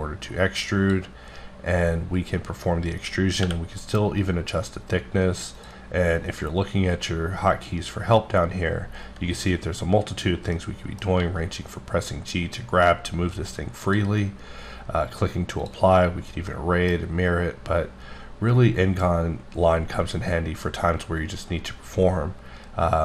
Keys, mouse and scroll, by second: 0.3-1.2 drag, 3.4 t, 5.5 click, 9.0 g, 10.5 middle click, 11.1 g, 13.8 click, 15.6 click, 16.1 scroll, 16.2 scroll down 1, 16.5 middle click.